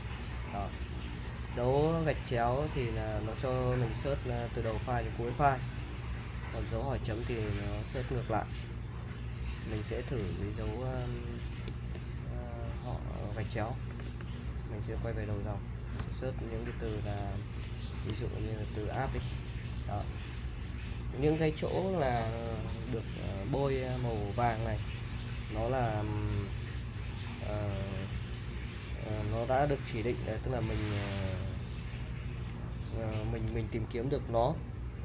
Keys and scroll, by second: 9.7 BackSpace, 13.9 typing, 16.0 /, 18.5-19.8 typing.